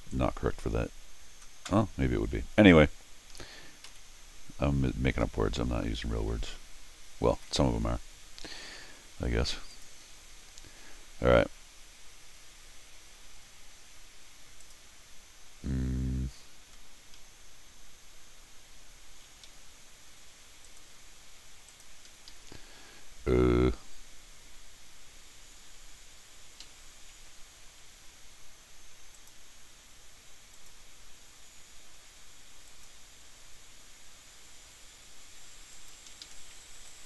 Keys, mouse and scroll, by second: 3.9 n, 5.2 middle click, 5.7 middle click, 7.4 ctrl+r, 9.7 click, 14.6 click, 16.8 middle click, 17.2 Escape, 19.3 alt+l, 20.7 click, 21.7 click, 22.1 Escape, 22.3 Escape, 22.7 middle click, 26.0 middle click, 26.0 scroll down 1, 26.6 Escape, 27.2 l, 29.1 click, 30.5 click, 32.7 click, 35.7 click, 36.1 Escape, 36.8 t, 36.9 click.